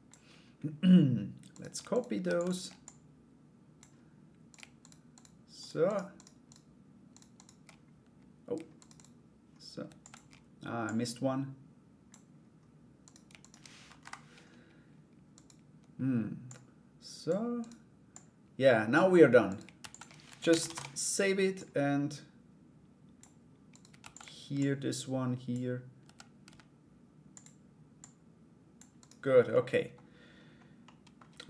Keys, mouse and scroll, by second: 1.1 right click, 1.5 shift+right click, 1.8 shift+d, 2.4 click, 4.1 right click, 4.4 right click, 4.7 right click, 5.2 shift+right click, 5.4 shift+right click, 5.7 shift+right click, 6.0 shift+right click, 6.7 shift+right click, 6.9 shift+right click, 8.4 shift+right click, 8.5 shift+right click, 9.4 shift+d, 10.4-11.7 drag, 12.6 right click, 13.0 shift+right click, 13.6 Delete, 14.9 right click, 16.0 click, 17.2 right click, 17.7 click, 19.0 right click, 19.4 shift+d, 19.8 r, 21.1-23.3 drag, 23.3 right click, 23.6 shift+d, 24.2-25.6 drag, 25.6 s, 27.5 click, 28.6 right click, 29.1 middle click, 30.4 middle click.